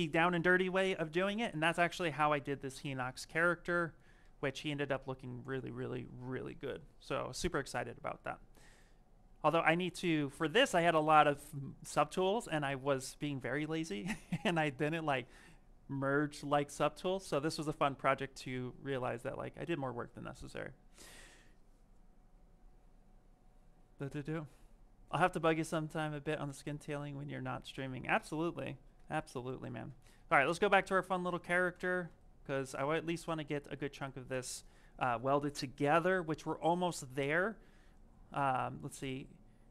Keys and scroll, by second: 33.3 shift+f.